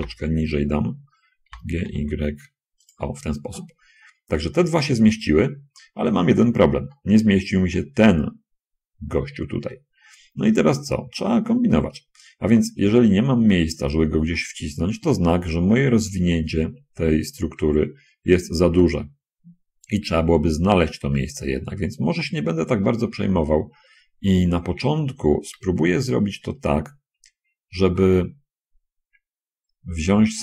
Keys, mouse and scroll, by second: 0.3 l, 1.7 g, 1.9 y, 3.2-3.7 scroll down 2, 3.8 scroll down 2, 4.5 scroll down 2, 4.7-5.9 shift+drag, 6.5-6.9 scroll down 2, 7.2 shift+middle click, 13.7-14.0 scroll up 2, 14.5 shift+middle click, 19.3-19.7 scroll up 2, 21.2-21.9 scroll up 2.